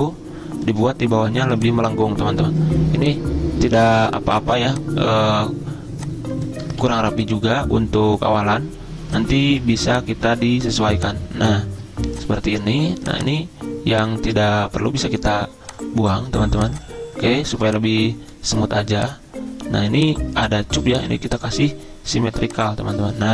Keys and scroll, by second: 6.8 ctrl+z.